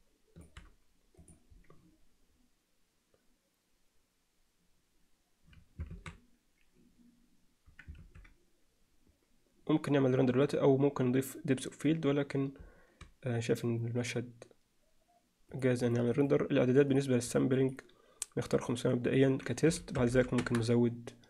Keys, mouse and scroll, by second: 6.0 alt+a, 8.0 ctrl+s, 15.5 click, 16.2 click, 17.7 drag, 18.6 click, 19.1-20.6 drag, 20.2 0.